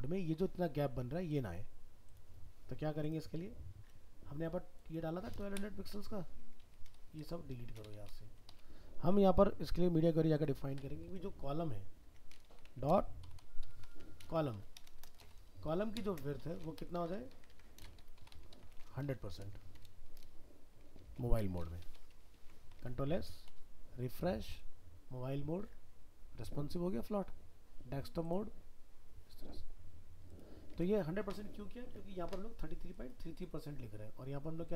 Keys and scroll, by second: 22.1 ctrl+s, 22.8 alt+Tab, 30.7 alt+Tab.